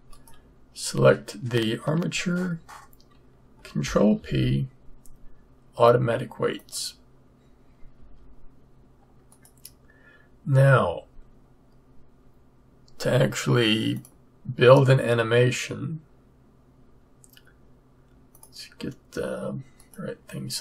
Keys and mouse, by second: 4.0 ctrl+p, 7.9 a, 13.9-15.7 drag.